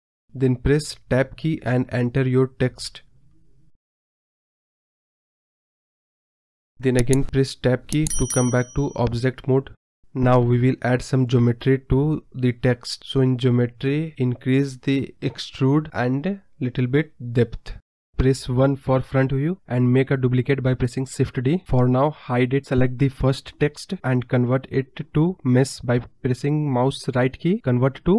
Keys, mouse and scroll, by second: 3.3 Tab, 3.8-5.9 typing, 6.2 Tab, 6.8 scroll up 1, 7.1 scroll down 1, 8.2-9.8 middle drag, 11.3-11.9 drag, 11.9-12.9 scroll down 3, 12.9-14.5 drag, 15.0-16.4 drag, 16.4 scroll up 1, 16.5-17.0 middle drag, 17.0 scroll down 3, 17.2-18.2 middle drag, 18.2 KP_1, 19.0 Tab, 20.2 Tab, 21.9 shift+d, 22.9 click, 23.3 click, 23.9 click, 24.2-25.8 right drag.